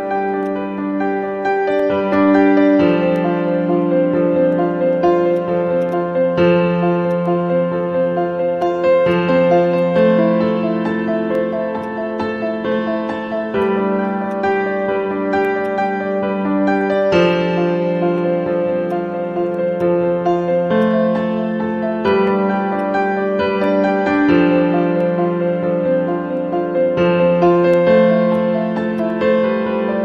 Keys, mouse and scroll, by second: 5.9 double click, 6.3 scroll up 1, 6.6-7.0 scroll down 1, 7.1 alt+click, 8.1 scroll down 1, 15.6 right click, 17.8 scroll down 1, 18.8 right click, 19.2-19.7 scroll down 1, 23.4 scroll up 1, 28.9 alt+click.